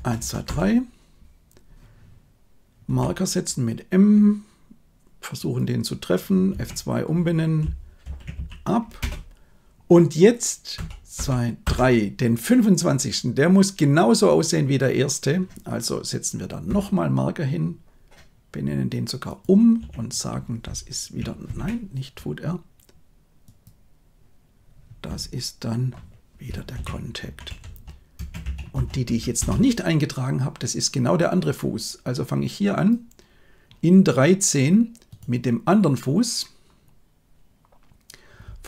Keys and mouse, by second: 0.1 Right, 0.4 Right, 2.8 m, 5.3 click, 6.4 F2, 10.7 Right, 11.1 Right, 11.6 Right, 16.6 m, 19.2 click, 19.7 F2, 23.4 click, 25.0 F2, 32.7 click.